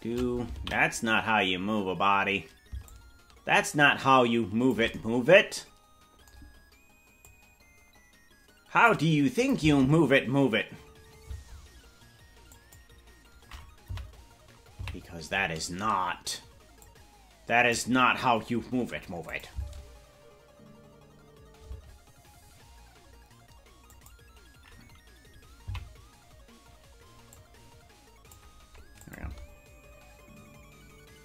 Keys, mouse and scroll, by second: 1.7 ctrl+z, 2.8-4.7 shift+drag, 7.2-8.9 drag, 9.4 click, 9.6 space, 12.5 click, 13.9 Right, 14.8 Left, 16.7-18.9 drag, 19.3 click, 19.5 space, 23.9 click, 23.9 space, 25.7 Left, 27.3-28.3 drag, 29.0 click, 29.2 space.